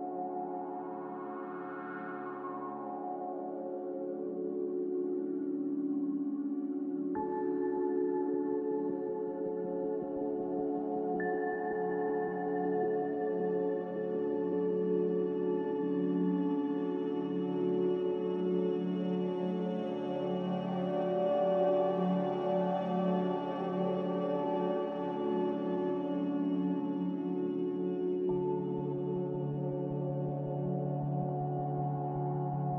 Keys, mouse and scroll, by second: 1.0-1.9 typing, 3.4 z, 16.5 Delete, 17.1 c, 21.8 Escape, 23.3 ctrl+z, 23.9 ctrl+z, 24.7 z, 25.3 Delete, 25.9 c.